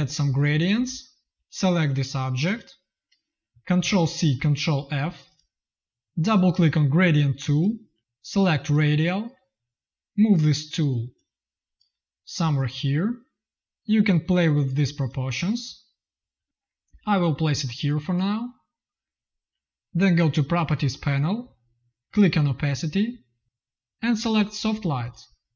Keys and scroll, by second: 3.7 ctrl+c, 4.8 ctrl+f.